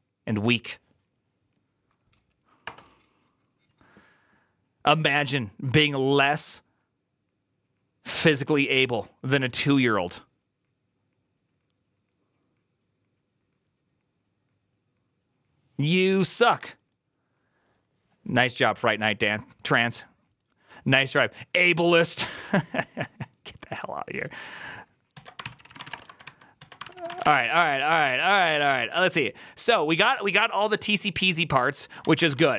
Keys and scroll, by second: 25.2 alt+{, 25.3 ctrl+c, 25.4-29.3 typing, 26.4 alt+{, 30.0 ctrl+u, 31.9 Return, 31.9 typing, 32.0 Return, 32.2 ctrl+d, 32.3 ctrl+d.